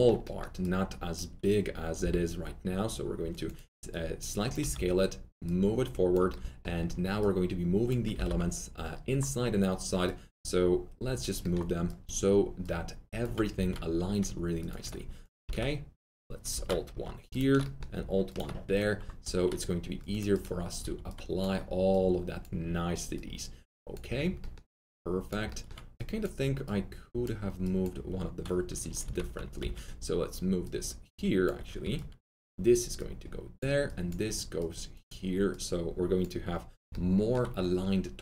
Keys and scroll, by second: 4.5 r, 7.9-8.7 typing, 13.5 alt+1, 15.4 ctrl+shift+z, 19.2 1, 29.0 ctrl+z, 29.6 ctrl+z, 31.8 1.